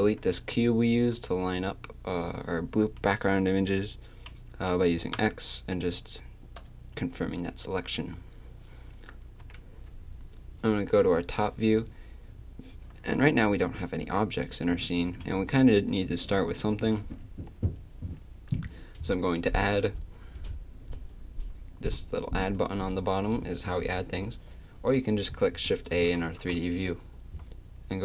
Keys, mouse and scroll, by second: 5.2 x, 9.4 KP_7, 26.3 shift+a.